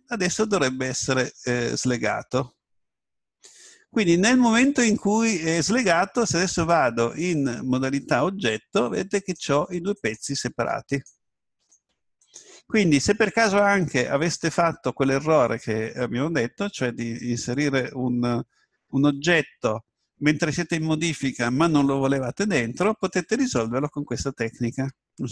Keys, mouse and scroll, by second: 6.7 Tab, 9.2-14.0 right drag.